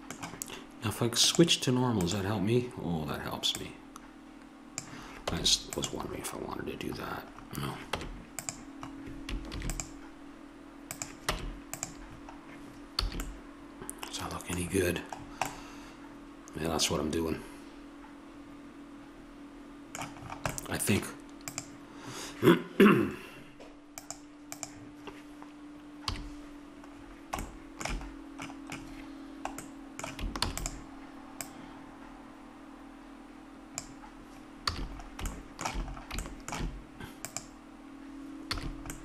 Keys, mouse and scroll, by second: 1.3-3.2 drag, 3.6-5.3 drag, 5.3 Tab, 7.9 Tab, 9.5 ctrl+r, 11.4 Tab, 13.1 a, 16.9 middle click, 21.5-23.4 drag, 24.0-25.9 drag, 26.0 KP_3, 30.4 shift+d, 31.4-33.3 drag, 34.7 a, 35.5 middle click, 37.2-39.0 right drag, 38.2 a.